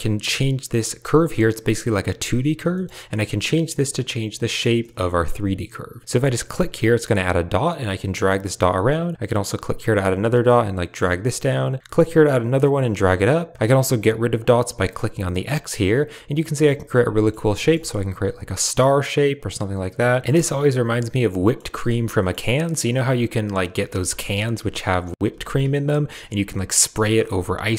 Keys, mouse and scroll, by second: 2.6 shift+middle click, 4.3 shift+middle click, 6.0 click, 6.8 click, 7.9 click, 9.4-10.1 drag, 10.2 click, 11.8-12.8 drag, 13.1 click, 14.3 click, 15.2 click, 15.8 click, 16.3 click, 17.0 middle drag, 17.4 middle drag, 18.5 click, 19.5 click, 20.1 click, 20.2 Tab, 20.3 middle click, 20.6 click, 21.7 shift+click, 22.1 click, 22.9 click, 23.7 r, 25.1 s, 25.8 g, 27.7 click.